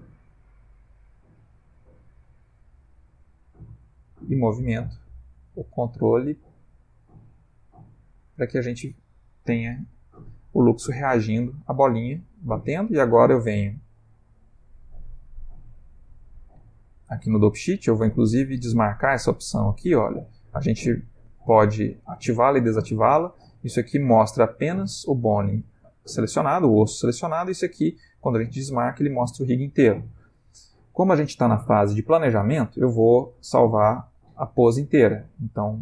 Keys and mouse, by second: 4.4 g, 6.9 click, 7.3 r, 16.0 click, 18.4 click, 18.9 click, 19.4 click, 19.7 click, 21.3 click, 24.1 click, 27.3 click.